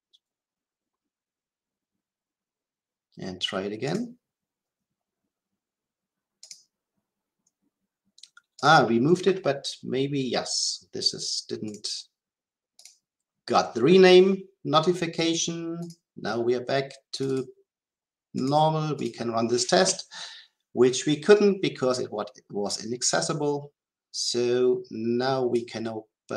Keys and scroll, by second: 3.8 shift+F10.